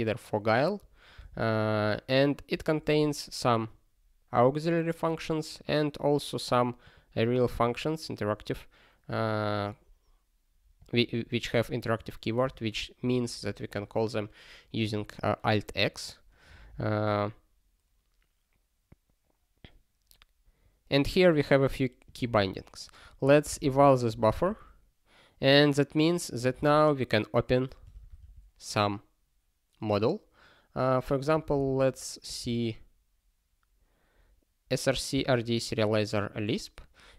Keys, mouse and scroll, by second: 2.2 click, 3.4 scroll down 1, 5.2 scroll down 1, 6.8 click, 7.4 scroll down 1, 8.4 scroll down 1, 10.7 click, 12.0 click, 12.4 click, 16.4 scroll down 1, 19.3 scroll down 1, 20.6 scroll down 1, 22.0 click, 23.0 alt+x, 24.3 Return, 26.6 super+b, 27.8 ctrl+g.